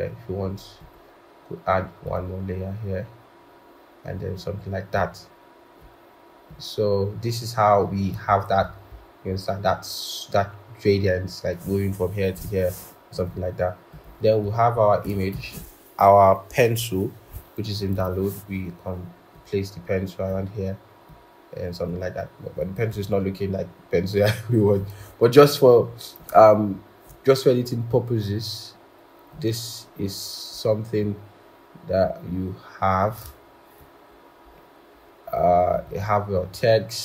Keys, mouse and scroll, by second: 8.7 scroll, 14.6 scroll, 15.2 ctrl+shift+p, 17.8 double click, 22.8-23.4 scroll, 24.8-25.2 scroll, 26.1 shift+click, 34.4-34.7 scroll, 36.3-36.8 scroll.